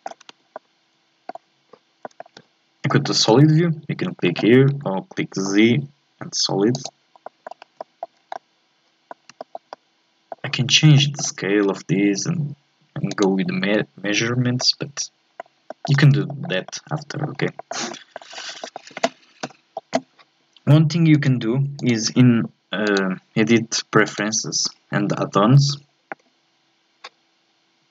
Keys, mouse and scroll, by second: 0.3 Tab, 0.5-2.3 middle drag, 2.3 z, 3.0-4.7 shift+middle drag, 4.7 z, 7.2 middle click, 7.6 scroll up 1, 7.8 shift+middle click, 8.1 scroll down 4, 8.3 scroll up 1, 8.4 middle click, 9.2 scroll up 2, 9.4-11.4 shift+middle drag, 11.4 s, 14.6-16.0 middle drag, 16.0 scroll up 2, 16.3-17.4 shift+middle drag, 17.4 scroll down 2, 17.6 shift+middle click, 17.9-18.3 scroll up 1, 18.3 scroll down 3, 18.6 shift+middle click, 19.5 n, 21.1-27.9 drag.